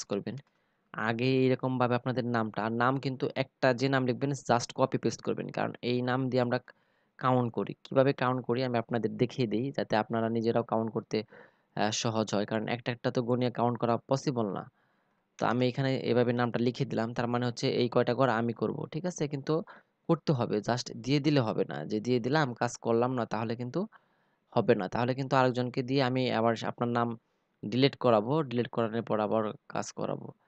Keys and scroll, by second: 13.7 ctrl+v.